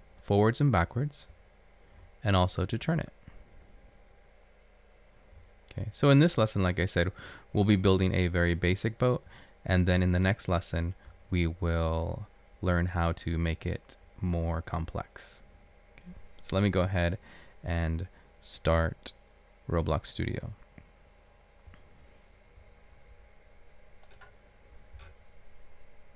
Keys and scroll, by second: 0.0 Down, 1.5 Up, 2.1 Left, 2.7 Up, 2.7 Left, 4.5 Left, 5.4 Right, 6.0 Right, 6.1 Right, 6.8 Right, 8.4 Right, 10.5 Up, 11.2 Up, 11.2 Left, 11.7 Left, 14.1 Left, 14.2 Up, 14.8 Up, 15.4 Up.